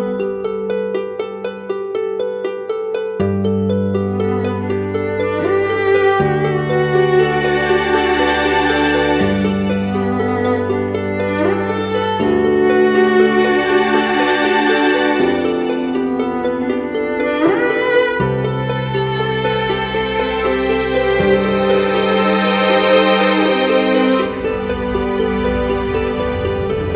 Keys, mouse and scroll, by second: 3.0 ctrl+t, 4.0 alt+shift+click, 6.6 alt+shift+click, 7.8 shift+Return.